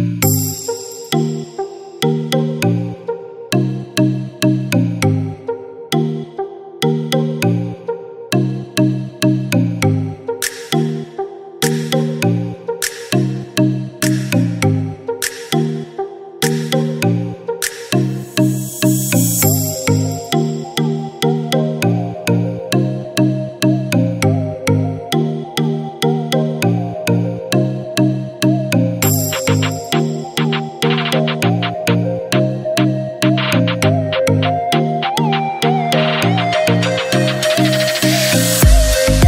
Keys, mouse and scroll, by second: 1.8 typing, 2.8 Return, 3.5 scroll down 1, 5.8 click, 12.7 click, 12.9 click, 15.5 click, 15.8 click, 18.2-18.7 scroll up 1, 18.8 click, 19.4 typing, 19.8-20.3 scroll down 1, 21.1-23.4 drag, 21.5 typing, 23.4 shift+right click, 23.4 typing, 25.0-32.2 shift+drag, 25.9 typing, 32.2 F4, 33.0 scroll down 1, 33.9 click, 34.4 scroll up 1, 34.9 click, 34.9 typing.